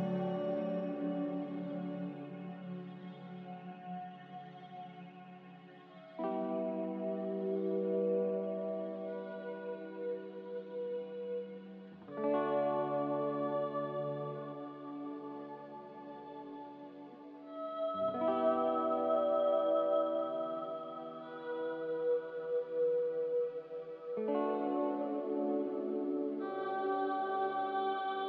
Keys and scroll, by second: 4.8 typing, 5.0 Return, 9.3 5, 9.4 Return, 11.0 2, 11.1 Return, 16.2 1, 16.3 Return, 21.1 z, 23.0 typing, 23.2 Return.